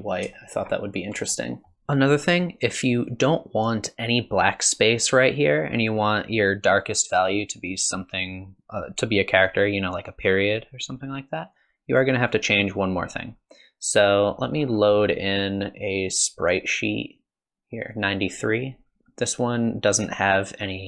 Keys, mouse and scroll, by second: 0.4 shift+middle click, 1.3 shift+middle click.